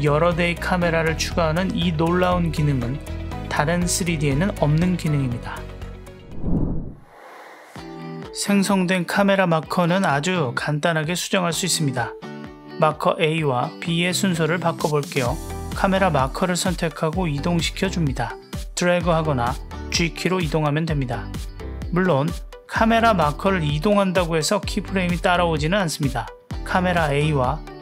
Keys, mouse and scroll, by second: 5.5 space, 8.8 click, 13.0 click, 14.6 click, 14.7-18.2 drag, 19.5 click, 20.2 click, 20.3-21.7 drag, 22.2 click, 22.4-24.2 drag, 25.9 click, 26.9 click, 27.7 click.